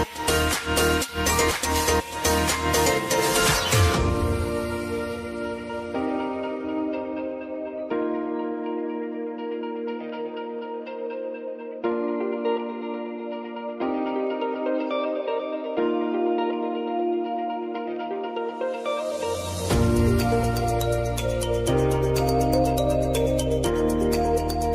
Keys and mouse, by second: 0.8-4.0 drag, 4.0 Return, 4.6 click, 5.0 F9, 5.9-8.9 drag, 9.1 space, 11.3 space, 14.2 space, 15.0 click, 17.4 space, 18.9 click, 21.1 u, 21.8 ctrl+a, 22.9 p.